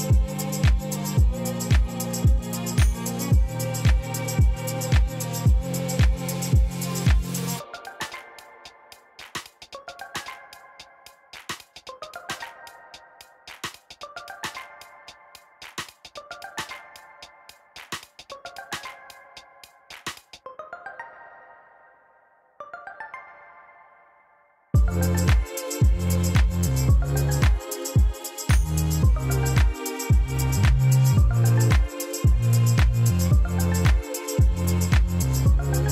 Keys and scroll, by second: 5.4 Tab, 7.3 Return, 8.0 g, 9.6 Escape, 9.9 b, 10.5 g, 12.8 alt+a, 12.9 c, 13.7 g, 16.3 alt+a, 16.5 c, 17.3 Return, 17.8 g, 19.5 g, 21.0 alt+a, 21.3 Tab, 24.7 shift+d, 24.8 shift+z, 26.5 shift+z, 27.1 r, 32.1 m, 33.6 Escape, 34.2 ctrl+z.